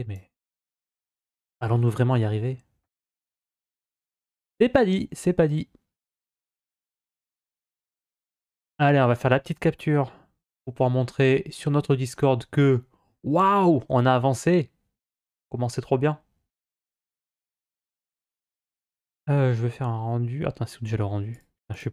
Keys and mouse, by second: 3.0-3.7 middle drag, 3.9 z, 6.3 click, 7.6-8.9 middle drag, 16.5 click, 17.2 click, 17.7 click, 21.5 click.